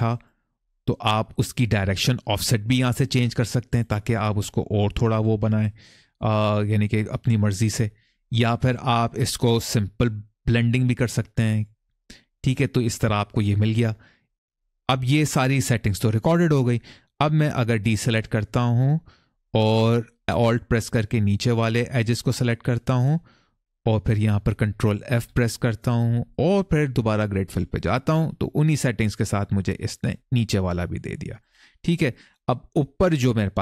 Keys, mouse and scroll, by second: 0.5 click, 2.2 click, 2.8 click, 3.5 click, 5.9 click, 6.4 click, 6.9 click, 10.3 click, 12.2 middle click, 17.1 click, 17.7 middle click, 21.8 alt+click, 25.0 ctrl+f, 29.7 middle click, 31.2 click, 31.7 middle click, 32.8-33.3 scroll down 2, 33.3 middle click.